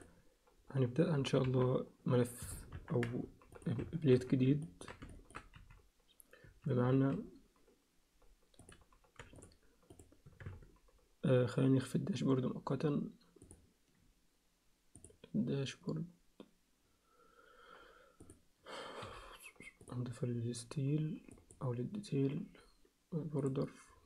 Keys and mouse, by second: 1.4 KP_3, 3.6 click, 3.8 Tab, 4.1 z, 4.6 ctrl+click, 4.7 ctrl+alt+middle click, 5.1 alt+shift+middle click, 5.5 z, 6.4 a, 6.9 alt+a, 8.6 click, 9.4 shift+click, 10.5 Tab, 13.4 click, 15.0 click, 19.0 m, 21.3 click, 23.4 click.